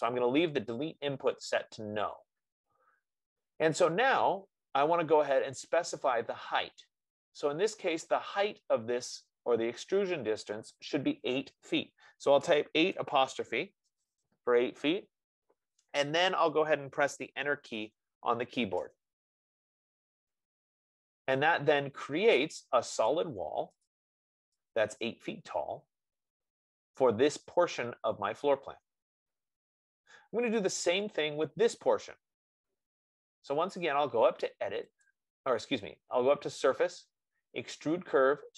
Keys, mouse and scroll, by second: 8.7 F15, 12.8-13.3 typing, 19.1 Return, 22.3-23.0 scroll, 23.4 click, 24.3 click, 31.6 click, 35.5 click.